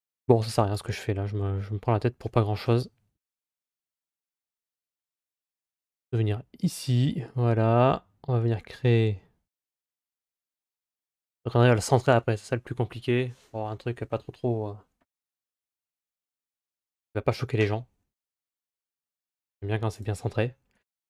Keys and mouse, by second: 0.3 Delete, 2.5 KP_Divide, 3.7 KP_Divide, 4.8-5.3 middle drag, 6.5 click, 7.1 middle click, 15.8 KP_7, 16.8 KP_3, 18.8 click, 20.6 shift+a.